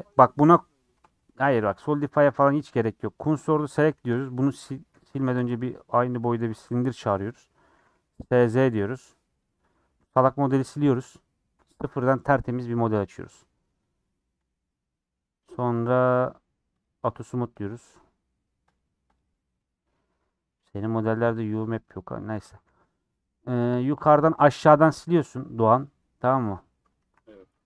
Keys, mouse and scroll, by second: 1.8 right click, 2.0 scroll down 3, 3.5 shift+s, 4.2 click, 6.8 shift+a, 7.8 s, 9.7 click, 10.3 x, 10.7 middle click, 11.1 click, 11.2-16.7 right drag, 16.7-17.7 drag, 18.7 click, 19.1 click, 21.5 click, 21.8 scroll up 2, 22.0 middle click, 22.4 Tab, 23.3 click, 23.5 middle click, 24.3 shift+click, 25.8 x, 26.0-27.0 middle drag, 27.0 ctrl+r.